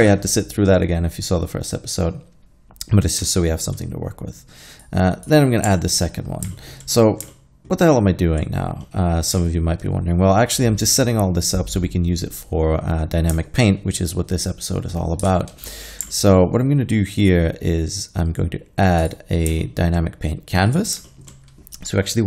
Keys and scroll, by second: 0.0 alt+a, 15.3 alt+a.